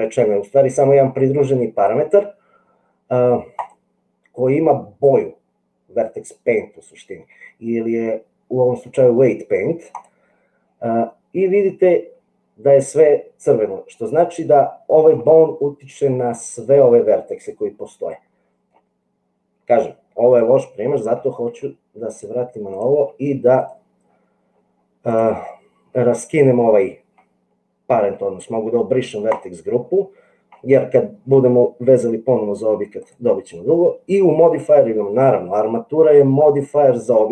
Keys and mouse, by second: 3.6-10.1 drag, 14.3 middle click, 17.5-18.7 middle drag, 20.6 middle click, 22.2 click, 29.2 click.